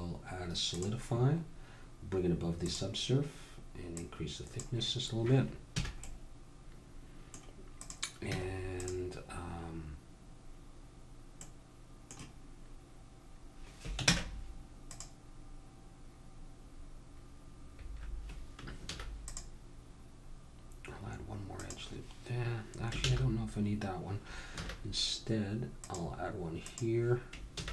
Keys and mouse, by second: 0.9-5.8 drag, 5.9 a, 6.0-7.8 middle drag, 7.8-10.9 drag, 8.3 Tab, 10.9-14.1 middle drag, 14.1 ctrl+Tab, 18.9 ctrl+r, 23.0 ctrl+z, 24.6 ctrl+r, 27.5 ctrl+r.